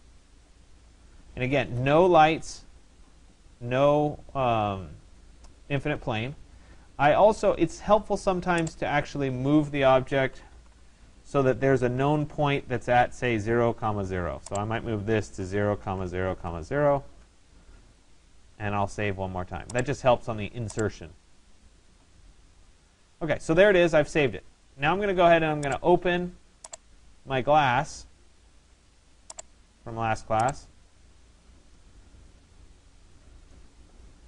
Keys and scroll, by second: 10.3 Return, 14.9 0, 17.2 Return.